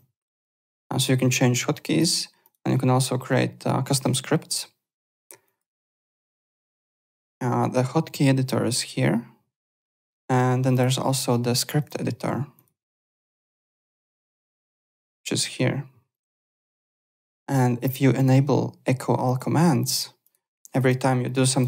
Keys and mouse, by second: 1.7 click, 5.4 click, 6.1 click, 7.1 click, 9.9 click, 10.1 alt+Tab, 10.7 alt+click, 11.7 click, 16.1 click, 18.1 click, 19.2 click, 20.2 click, 20.8 click, 21.5 click.